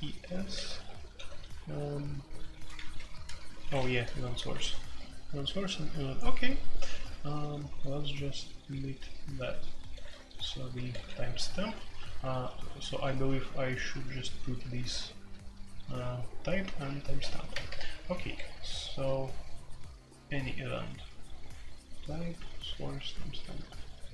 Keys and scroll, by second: 0.0-5.1 typing, 9.9-17.4 typing, 17.5 alt+k, 17.7 alt+k, 18.5-19.2 typing.